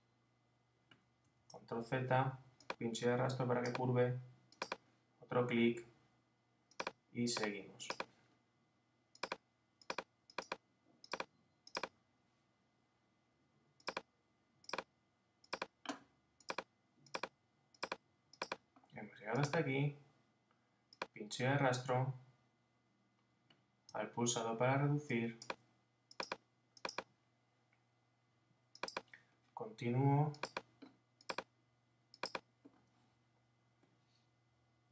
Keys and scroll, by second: 1.4 super+z.